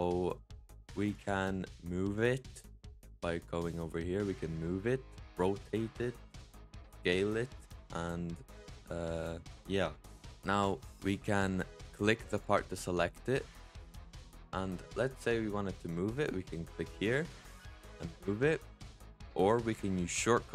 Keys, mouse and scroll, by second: 1.0-4.0 drag, 5.1-9.6 drag, 10.2 click, 12.2 click, 13.6-15.0 drag, 15.0 middle click, 15.4-16.8 scroll up 2, 16.8-17.9 drag, 19.6 ctrl+z.